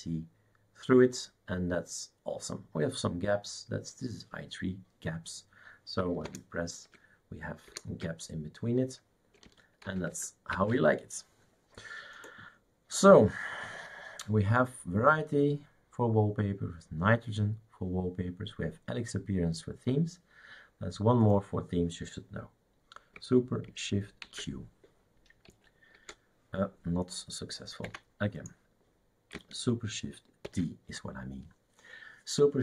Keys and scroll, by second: 7.7 super+Return, 9.9 shift+super+q, 10.2 shift+super+q, 10.5 shift+super+q, 24.3 shift+super+q, 25.5 q, 26.5 t, 28.1 Escape.